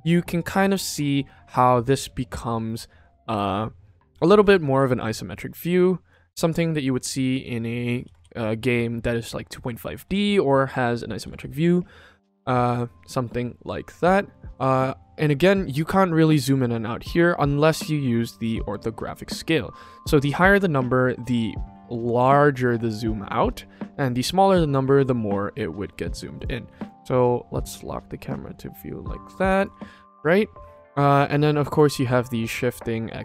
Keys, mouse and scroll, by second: 2.2-3.1 shift+middle drag, 4.2 ctrl+s, 4.7-5.3 middle drag, 6.0-7.4 middle drag, 8.0 ctrl+s, 9.1 middle click, 10.1 ctrl+s, 10.5-10.8 middle drag, 11.2 ctrl+s, 17.9-20.4 drag, 20.9-24.1 drag, 26.0 q, 26.6 q, 26.9-29.2 shift+middle drag, 29.4 q, 29.7 ctrl+s, 32.2-33.2 drag.